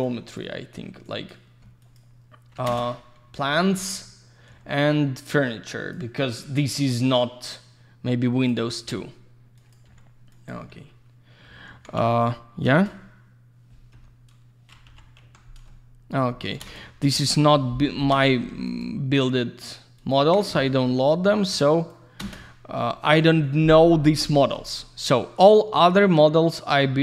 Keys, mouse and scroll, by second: 0.0 ctrl+click, 1.1 ctrl+click, 1.8 alt+click, 1.9 alt+click, 2.7 ctrl+space, 3.5-3.8 scroll up 1, 3.8 middle click, 4.2 scroll up 1, 4.9 click, 6.9 alt+click, 8.8 alt+q, 9.6 alt+click, 9.7 alt+click, 9.9 alt+q, 10.3 alt+click, 10.5 alt+click, 10.6 alt+q, 11.7 alt+w, 12.7 alt+shift+q, 13.9 F3, 14.9 typing, 15.7 alt+middle click, 16.3 middle click, 16.5 middle click, 16.6 ctrl+space, 17.0 scroll down 1, 17.3 alt+middle click, 17.5 middle click, 18.0 F3, 18.7 click, 18.8 click, 20.0 ctrl+click, 20.1 ctrl+click, 20.5 F4, 21.0 ctrl+click, 21.8 ctrl+click, 22.2 ctrl+space, 22.8 alt+middle click, 23.2 alt+z, 23.4 click, 23.8 F4, 24.6 alt+middle click.